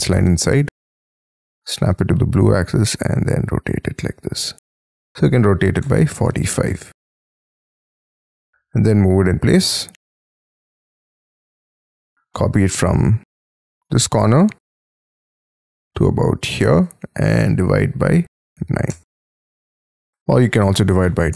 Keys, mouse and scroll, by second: 0.9 Up, 5.1 4, 5.4 5, 5.8 Return, 6.2 space, 6.6 y, 6.9 middle click, 7.3-7.7 scroll down 11, 8.1 ,, 8.4 m, 10.1 shift+click, 10.5 space, 10.6 middle click, 10.9 m, 13.9-14.9 scroll down 16, 14.9 scroll up 5, 16.6 shift+click, 17.4 /, 18.5 9, 18.9 Return, 19.5 scroll down 5, 20.3-21.3 typing.